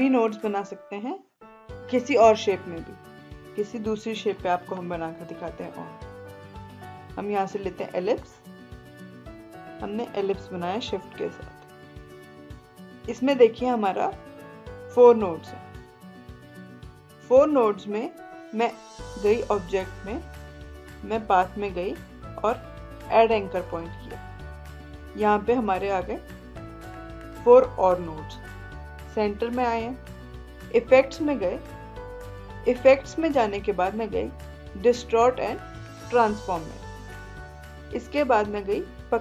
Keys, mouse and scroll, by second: 3.3-14.5 drag, 19.9 click, 23.7 click, 31.7 click, 32.9 click.